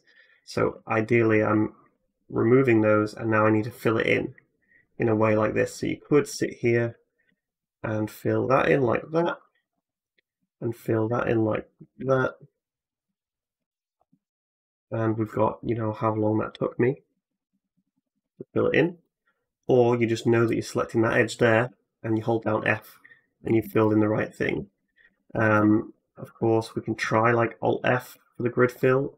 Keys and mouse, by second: 1.6 ctrl+right click, 1.8 x, 6.1 2, 7.0 middle click, 7.0 right click, 8.0 shift+middle click, 8.0 shift+right click, 9.0 f, 10.1 middle click, 10.1 right click, 10.6 shift+middle click, 10.6 shift+right click, 11.8 f, 12.8 middle click, 12.8 click, 13.2 shift+middle click, 13.3-19.3 shift+drag, 13.9 f, 17.1 ctrl+z, 17.3 ctrl+z, 17.6 ctrl+z, 17.8 ctrl+z, 18.0 ctrl+z, 18.2 ctrl+z, 18.4 ctrl+z, 20.3 middle click, 21.4 click, 21.5-22.2 f, 23.3 a, 23.4 a, 24.4 ctrl+z, 24.6 ctrl+z, 24.9 ctrl+z, 25.2 ctrl+z, 25.2-29.1 ctrl+drag, 25.4 ctrl+z, 26.6 alt+middle click, 26.6 alt+right click, 27.6 alt+f.